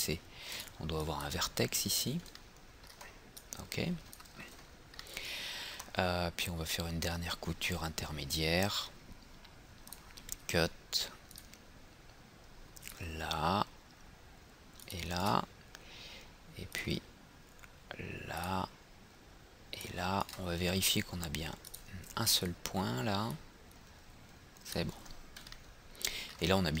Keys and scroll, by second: 4.5 ctrl+z, 25.0 ctrl+z.